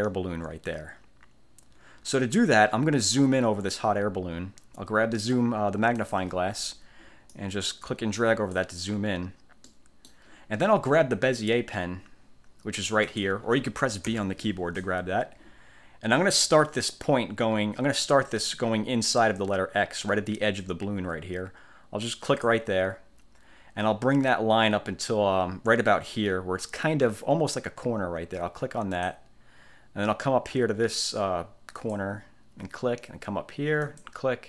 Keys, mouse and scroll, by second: 6.1 click, 7.4-8.9 drag, 9.7 click, 9.9 middle click, 9.9 click, 10.2 middle click, 13.2 click, 14.1 b, 22.3 click, 29.1 click, 31.9 click, 34.0 click.